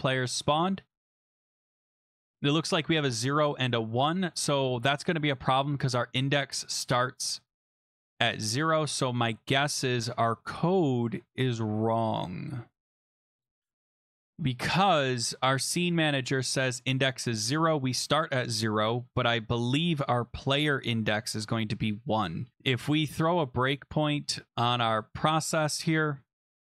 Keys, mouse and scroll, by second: 1.5 click, 1.7-2.1 scroll, 8.4 click, 17.7 click, 21.8-22.5 scroll down 10, 22.5-23.9 scroll up 6, 23.9 scroll down 1, 24.0-24.5 scroll, 25.0 click, 26.3 scroll.